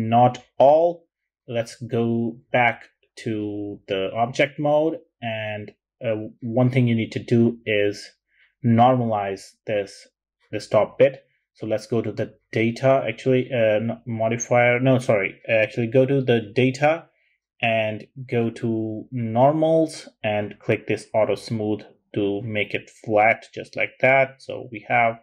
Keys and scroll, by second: 1.6-1.9 typing, 3.5-4.3 typing.